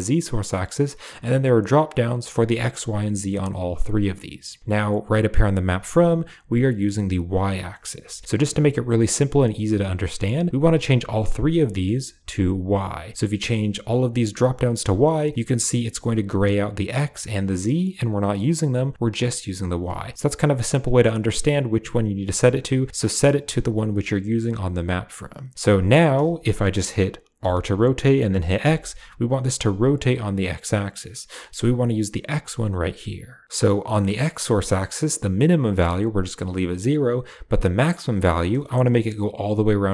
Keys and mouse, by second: 1.3-3.5 drag, 10.1-10.8 drag, 11.4-12.6 drag, 13.8-14.3 drag, 26.5 middle click, 27.3 r, 37.7-39.9 drag.